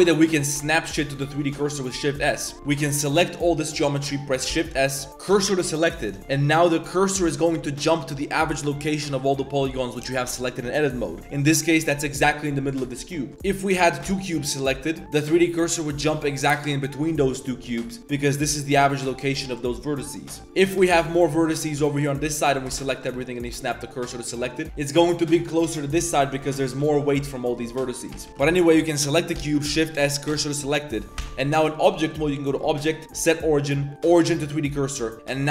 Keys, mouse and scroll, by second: 1.3 click, 1.6 shift+drag, 1.9 click, 2.3 Tab, 2.4 shift+click, 2.5 z, 2.7 a, 2.9 b, 4.5 shift+s, 6.2 click, 9.4 click, 11.2 click, 11.6 click, 13.1 click, 13.3 shift+d, 13.7 a, 14.0 shift+s, 20.4-22.7 typing, 24.4 click, 26.8 a, 26.9 a, 27.1 b, 28.1 ctrl+z, 28.3 x, 28.4 a, 28.5 b, 29.3 shift+s, 30.6 click, 31.2 Tab, 32.4-34.1 drag.